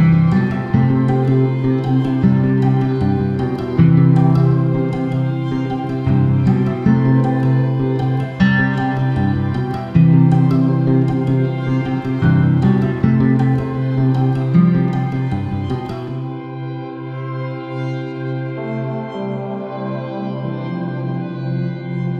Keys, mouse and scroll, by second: 2.2 click, 2.6 KP_Decimal, 3.3 s, 4.6 click, 4.9-6.8 middle drag, 5.5 g, 7.0 click, 7.4 s, 8.8 click, 9.1 g, 11.0 click, 11.2 scroll down 2, 12.0-13.6 middle drag, 12.7 g, 13.6 click, 13.9 s, 14.9 click, 15.3 shift+d, 17.1 click, 17.8 shift+d, 18.8 click, 19.8 shift+d, 21.4-22.1 middle drag, 21.8-22.1 scroll down 1.